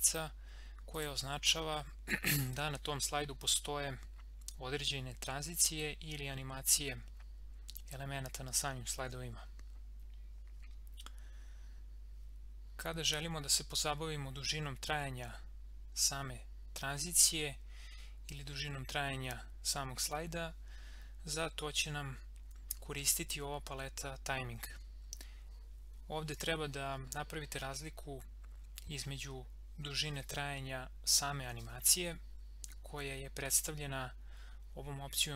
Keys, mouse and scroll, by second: 1.0 click.